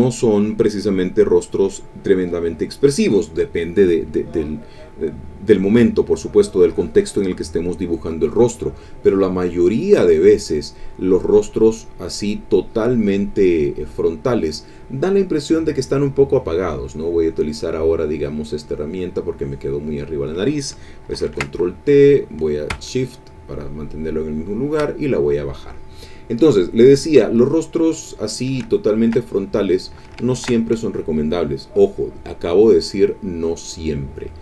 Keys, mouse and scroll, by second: 11.3-12.5 drag, 12.6 click, 17.2 click, 18.1 click, 19.0 click, 19.8 click, 21.1 ctrl+t, 22.2-24.9 drag, 26.6 click, 27.3 middle click, 28.2 middle click, 28.8 ctrl+middle click, 30.3 ctrl+shift+a, 32.6 click, 33.5 click.